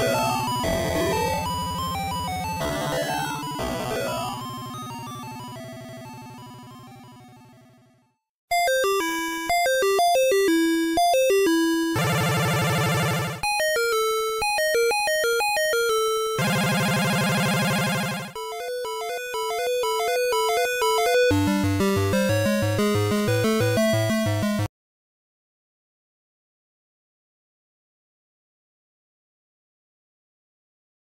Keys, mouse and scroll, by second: 2.3 click, 3.4 ctrl+s, 6.0 click, 8.4-9.0 scroll down 2, 10.5-11.5 scroll down 3, 11.9-12.8 scroll up 2, 13.7 click, 23.3 click, 23.8 click, 28.7 click, 30.2 click.